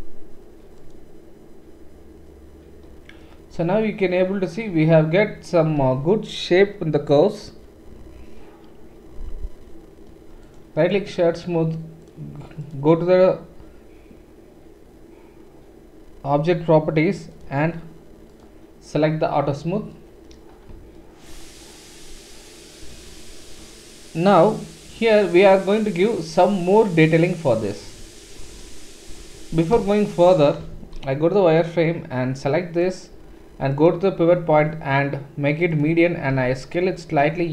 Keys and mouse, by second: 10.5-17.3 right drag, 17.3-19.3 middle drag, 19.3-23.2 right drag, 23.0 click, 23.2-25.1 drag, 25.1-31.0 right drag, 27.9 Tab, 29.7 KP_1, 30.8 shift+z, 31.0-37.5 drag, 31.3-37.5 middle drag, 31.3-37.5 right drag, 36.3 s.